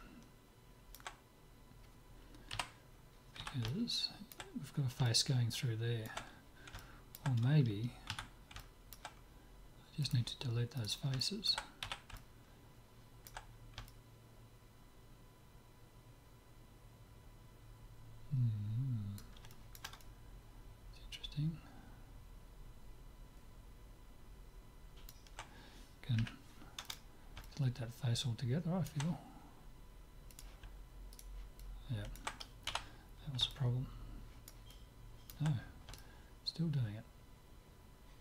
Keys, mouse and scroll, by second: 0.6-3.1 middle drag, 2.5 KP_Divide, 3.4 z, 3.7 middle click, 8.1 Tab, 10.0-12.0 drag, 10.0 middle click, 10.8-12.6 right drag, 12.0 z, 12.6 click, 12.8-15.6 middle drag, 19.5-22.0 middle drag, 26.2 Delete, 27.5-29.2 middle drag, 30.3-32.3 drag, 31.1-32.9 right drag, 32.7 f, 37.4 middle click.